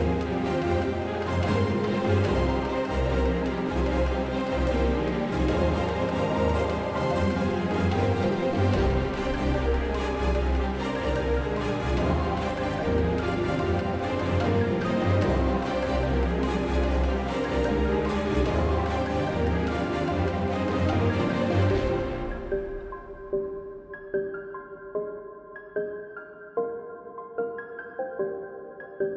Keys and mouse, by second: 0.0-2.8 typing, 3.4 drag, 7.7-9.7 typing, 9.0 Tab, 10.7 Tab, 12.0 Tab, 12.0-12.6 drag, 13.6-14.1 middle drag, 14.1 q, 14.4 a, 14.5 a, 14.7 u, 16.3 middle click, 18.0 q, 18.4 a, 18.5 a, 18.8 u, 20.0-22.3 drag, 22.3 q, 22.5 a, 22.8 a, 22.8 u, 23.9 Tab, 25.7 Tab, 26.3 n, 26.7 n, 27.2-27.6 middle drag, 28.3 shift+space, 28.6 Tab.